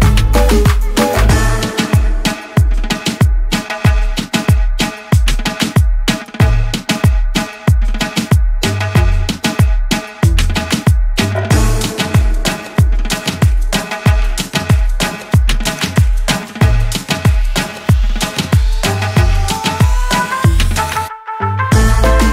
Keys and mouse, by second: 0.7 click, 2.1 click, 2.5 ctrl+a, 3.6-5.9 typing, 7.3 click, 7.9 ctrl+d, 9.0 click, 9.4 ctrl+a, 10.6 x, 12.9 click, 15.1 ctrl+d, 19.2 click, 19.9-22.3 typing.